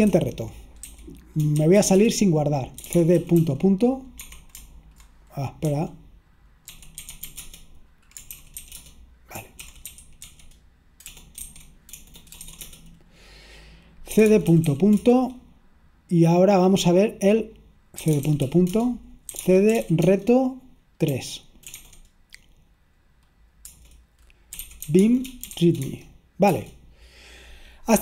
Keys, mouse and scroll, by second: 0.2-12.9 typing, 14.1-15.2 typing, 18.0-21.8 typing, 23.8 Return, 24.3-28.0 typing.